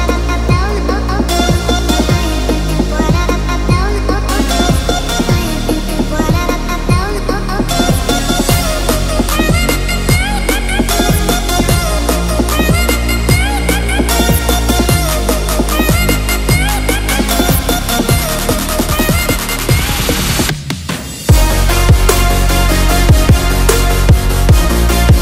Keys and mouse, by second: 0.0 ctrl+r, 6.5 a, 7.4 s, 10.1 KP_1, 11.3 ctrl+r, 12.5 alt+z, 12.8 click, 14.5 shift+click, 15.7 x, 17.0-17.4 middle drag, 17.9 KP_7, 18.7 click, 20.0 x, 21.1 middle drag, 21.7 Tab, 22.9 click, 23.7-25.2 drag.